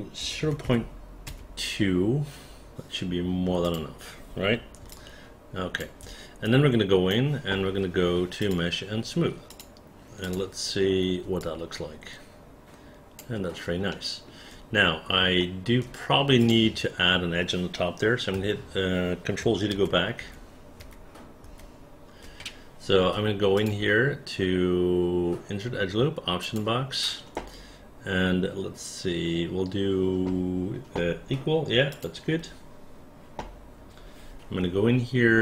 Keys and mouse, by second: 0.3 KP_0, 0.5 KP_Decimal, 0.7 KP_2, 1.4 Return, 3.7 click, 5.0 alt+click, 6.6 right click, 10.3 click, 11.5-13.3 alt+drag, 14.1 alt+middle click, 15.5 alt+middle click, 16.5 click, 18.4 1, 19.8 ctrl+z, 20.3 ctrl+z, 20.9 ctrl+z, 21.6 ctrl+z.